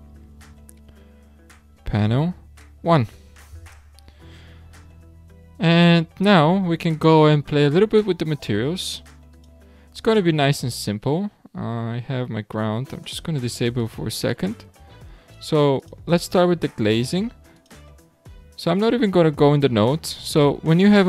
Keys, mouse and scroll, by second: 0.0 BackSpace, 0.2 BackSpace, 0.4 BackSpace, 7.1-9.5 drag, 11.1-12.1 scroll down 4, 13.8 click, 14.5-15.3 scroll up 2, 15.3 click, 15.8 click, 17.5-20.6 drag, 20.8 click.